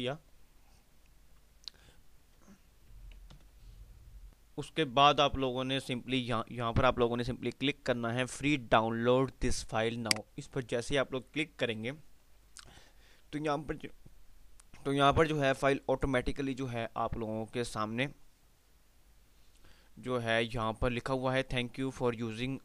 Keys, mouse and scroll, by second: 0.6 F5, 2.1 typing, 3.5 F10, 4.5 click, 6.3 typing, 10.2 click, 10.2 typing.